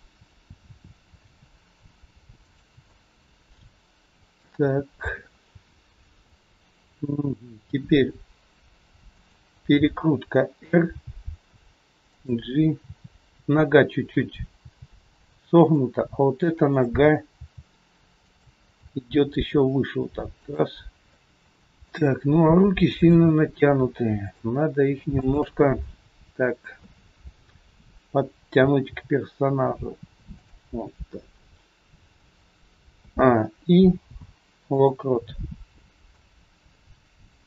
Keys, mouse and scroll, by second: 1.3 r, 3.7 middle click, 4.8-5.8 scroll down 5, 5.8 scroll down 1, 6.3 click, 6.3 scroll up 3, 7.6 r, 10.7 g, 12.7 scroll down 1, 14.6 scroll down 2, 14.6 g, 16.6 click, 17.3 g, 18.7 r, 21.0 middle click, 21.0 scroll up 3, 21.1 middle click, 21.5 shift+middle click, 22.1 scroll up 1, 23.0 click, 24.2 shift+click, 25.1 click, 25.8 middle click, 26.8 KP_3, 27.1-27.4 scroll down 3, 28.2-28.8 scroll down 1, 29.0 g, 31.3 scroll down 1, 33.0 a, 34.0 i, 36.1 click.